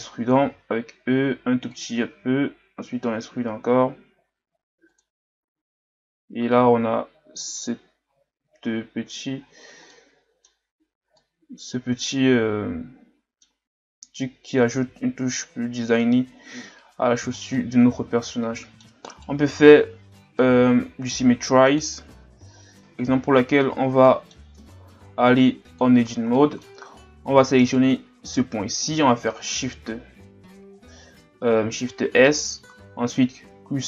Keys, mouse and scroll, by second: 0.4 e, 2.1 e, 5.1 Tab, 5.8 a, 6.1 scroll down 3, 6.5-9.4 middle drag, 9.4-9.9 scroll up 3, 9.9-10.8 middle drag, 10.8-11.2 scroll up 1, 11.2-13.7 middle drag, 13.7-14.7 scroll down 3, 14.7-19.1 middle drag, 19.1 right click, 19.4 Tab, 20.4-22.1 middle drag, 22.1 Tab, 22.6 scroll down 4, 22.8 middle click, 23.0-23.4 scroll up 2, 23.4 Tab, 24.0 middle click, 24.6 ctrl+Tab, 26.1 scroll down 2, 26.4-27.6 middle drag, 27.6 right click, 28.2-31.3 middle drag, 31.9 shift+s.